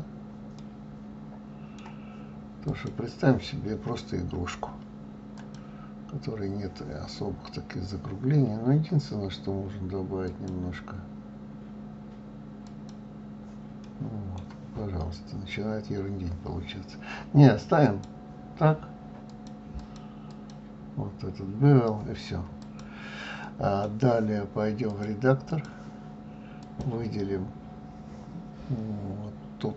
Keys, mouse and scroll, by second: 0.5-2.7 middle drag, 2.7 click, 5.3 click, 7.4 scroll down 2, 10.2-13.4 drag, 13.8-14.8 middle drag, 14.8-15.9 scroll up 2, 16.0-17.8 scroll down 2, 17.8-21.9 drag, 22.5 click, 23.4-24.9 middle drag, 24.9-26.7 drag.